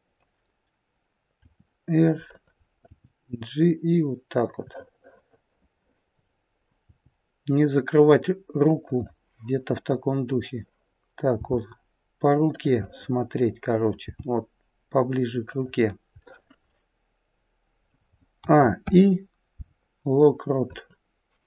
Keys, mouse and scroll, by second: 1.3 r, 2.8 g, 4.7 middle click, 6.2 middle click, 6.8 g, 11.3 g, 12.7 middle click, 14.0 g, 16.2 middle click, 18.4 a, 18.7 i.